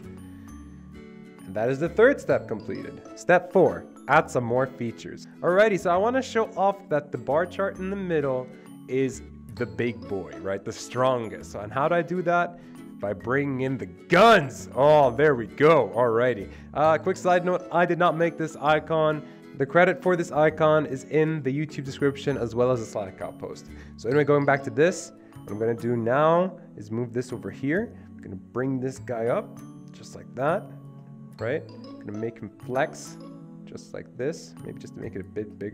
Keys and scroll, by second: 0.0 Escape, 14.2 ctrl+v.